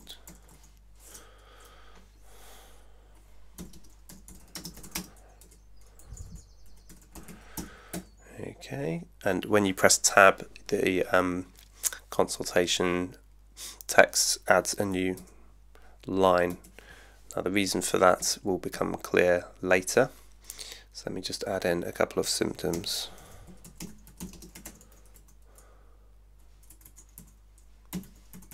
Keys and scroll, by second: 0.0-1.0 typing, 3.8-8.1 typing, 18.2 Up, 22.5-25.7 typing, 26.8-28.5 typing.